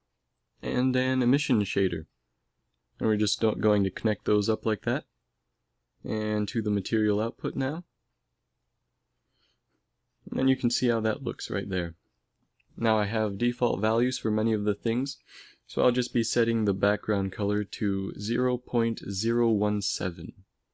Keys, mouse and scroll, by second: 1.2 shift+a, 3.7 click, 8.2 click, 9.2 click, 9.2 f, 10.1 shift+z.